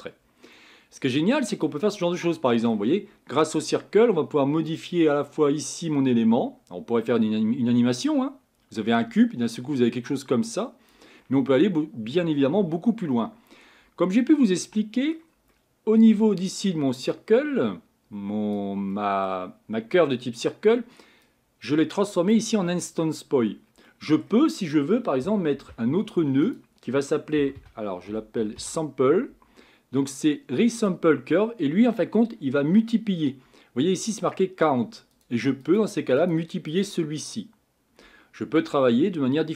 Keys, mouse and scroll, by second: 0.5-3.1 middle drag, 3.1-4.9 scroll up 1, 4.9-7.7 drag, 13.2 middle click, 14.0-19.3 scroll down 3, 35.2-39.5 drag.